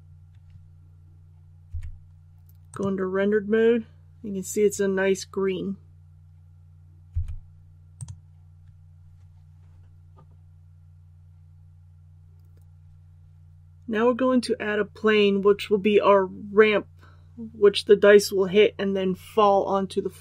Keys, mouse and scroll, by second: 1.6 z, 2.7 click, 7.0 z, 7.9 click.